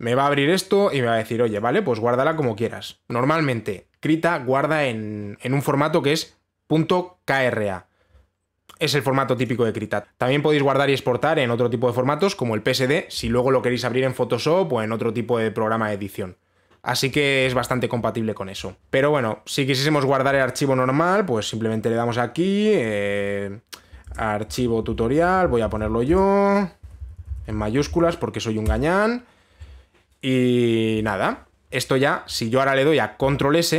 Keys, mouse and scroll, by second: 2.2 click, 3.0 click, 19.1 click, 20.7 click, 24.8-29.0 typing.